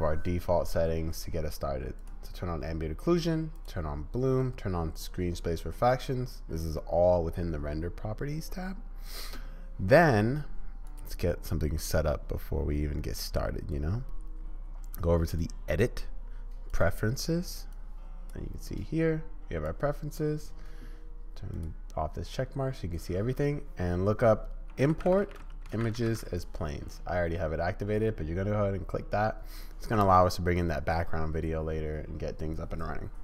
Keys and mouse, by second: 2.0 click, 3.6 click, 4.9 click, 11.0-16.9 drag.